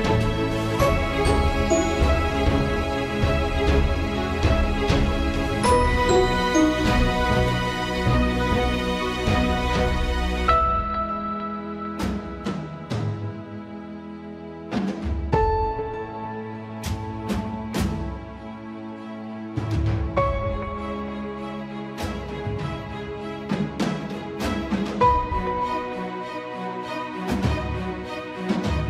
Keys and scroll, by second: 8.1 alt+/, 9.6 ctrl+a, 10.2 ctrl+s, 12.0 ctrl+c, 12.1 Escape, 12.5 ctrl+c, 12.7 super+r, 12.8 ctrl+a, 12.9 Return, 13.0 ctrl+v, 13.4 Return, 14.5 ctrl+s, 16.2 ctrl+z, 21.2 alt+/, 26.0 ctrl+z.